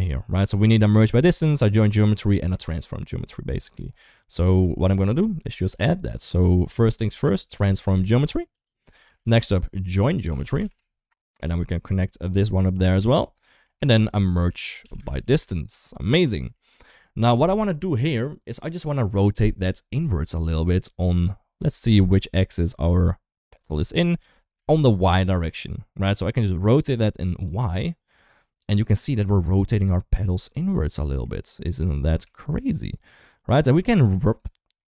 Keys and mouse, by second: 1.2 shift+middle click, 2.1 shift+middle click, 4.7 shift+middle click, 5.3 shift+a, 9.0 shift+a, 12.2 drag, 12.4-13.0 drag, 13.4 middle click, 13.6 shift+a, 16.4 middle click, 21.7 middle click, 23.3 ctrl+shift+click, 24.4 ctrl+z, 27.4-29.3 drag, 29.5-31.0 middle drag, 32.2-34.1 shift+drag.